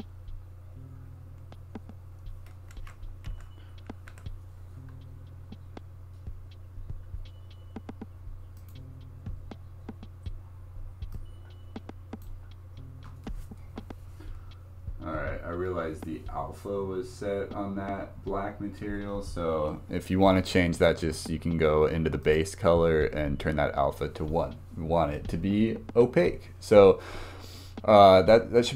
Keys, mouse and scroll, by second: 2.8 ctrl+z, 3.3 ctrl+z, 4.1 ctrl+z, 8.6 click, 14.4-18.9 drag, 22.2 click.